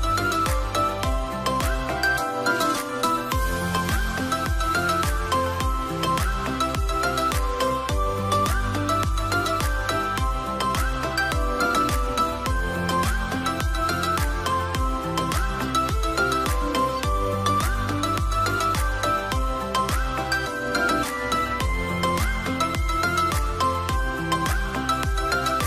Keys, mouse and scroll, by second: 7.0-9.0 scroll up 1.